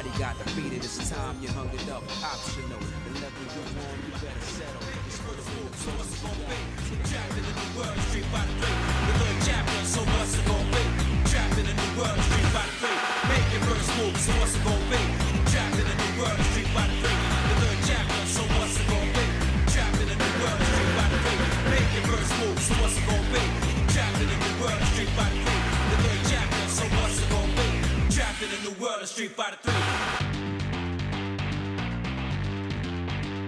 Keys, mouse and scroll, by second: 0.1 shift+click, 1.5 j, 2.0 click, 2.5 shift+click, 3.5 j, 3.8 middle click, 4.4-4.8 scroll down 2, 5.0 scroll up 1, 5.9 click, 6.7 shift+click, 9.5 j, 10.3 click, 10.9 shift+click, 11.9 j, 12.9-14.7 shift+middle drag, 15.3-16.7 shift+middle drag, 17.2 click, 18.4 ctrl+right click, 19.3-20.6 shift+middle drag, 21.4 ctrl+right click, 22.2-23.3 shift+middle drag, 24.5 shift+middle click, 26.0 r, 30.7 z.